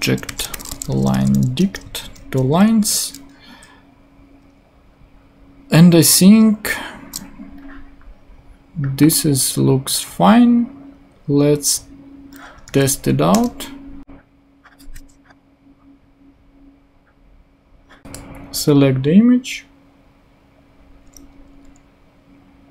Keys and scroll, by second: 0.0-1.0 typing, 1.5 shift+Return, 2.0 super+Right, 2.3 super+;, 3.1 ;, 12.6 super+r, 13.3 super+Return, 14.9 super+/.